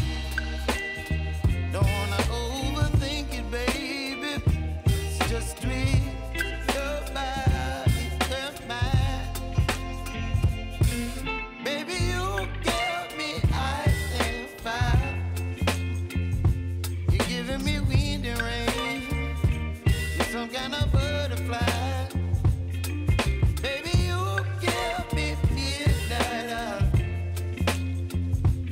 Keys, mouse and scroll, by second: 2.0 space, 7.1 space, 7.5-9.9 drag, 14.4 space, 15.7 click, 25.6 space, 28.0 space.